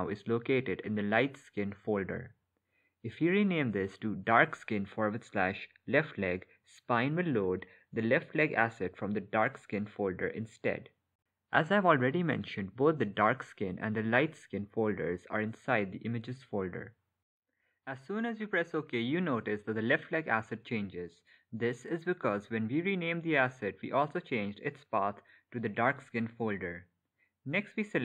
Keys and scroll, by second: 0.1 Left, 1.3 BackSpace, 2.9-5.0 typing, 7.0 BackSpace, 10.7 k.